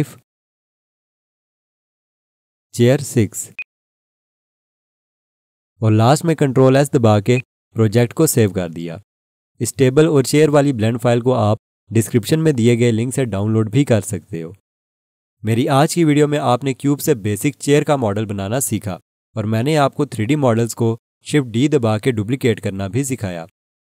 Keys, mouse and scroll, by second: 0.4 F2, 0.6-2.3 typing, 3.5 click, 4.2 F2, 4.4-5.8 typing, 6.1 Return, 7.3 click, 8.1 ctrl+s.